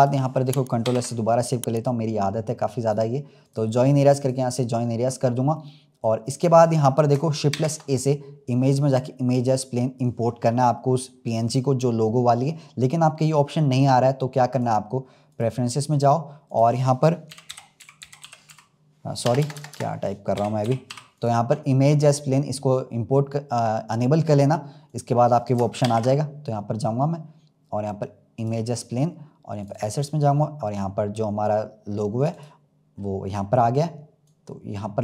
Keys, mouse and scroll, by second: 2.7-4.9 right drag, 4.9-5.4 scroll down 2, 5.4-7.4 middle drag, 7.4 shift+a, 14.4-17.6 drag, 25.8 shift+a, 33.2-34.2 scroll down 4, 34.2-35.0 drag.